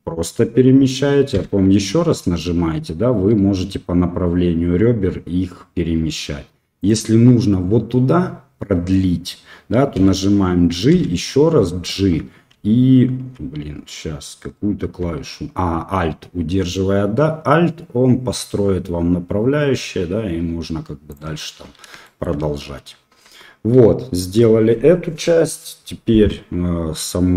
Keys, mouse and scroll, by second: 9.9 g, 22.0 shift+click, 23.2 Tab.